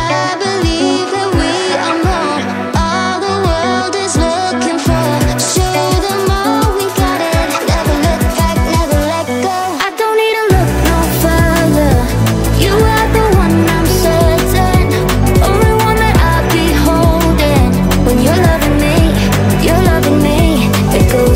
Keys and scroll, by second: 15.9-16.8 typing.